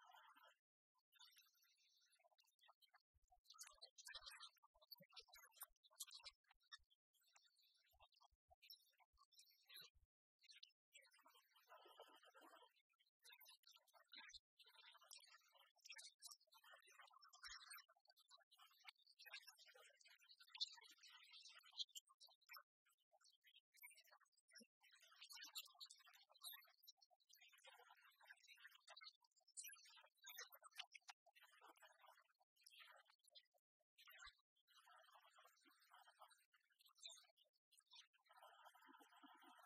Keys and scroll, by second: 3.7 ctrl+t, 15.7 Return.